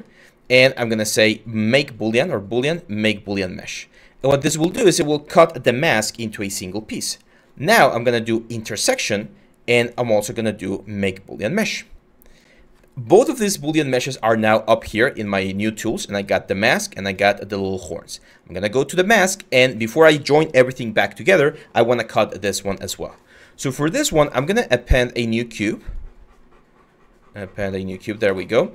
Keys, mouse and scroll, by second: 27.9 w.